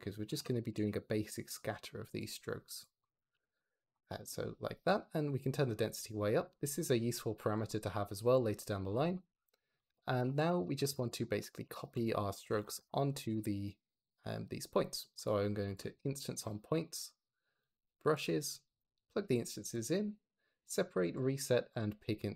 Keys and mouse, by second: 2.6 click, 2.9 click, 3.2 g, 4.8-6.3 drag, 7.6 click, 10.0 g, 10.2 x, 10.7 shift+a, 15.5 click, 19.6 click, 20.6 click, 20.9 click, 21.6 click.